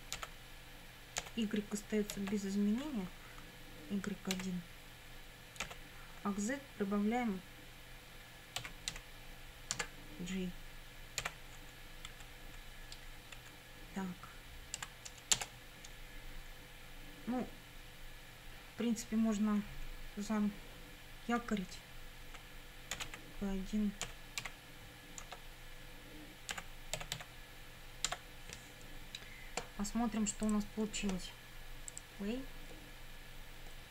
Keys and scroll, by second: 0.2 i, 1.2 ,, 2.2 y, 4.3 1, 5.6 ,, 8.6 z, 8.9 1, 11.2 j, 12.1 Right, 13.4 Up, 14.8 End, 15.4 Return, 22.7-24.4 typing, 25.3 Tab, 26.3-27.7 typing, 28.1 Tab.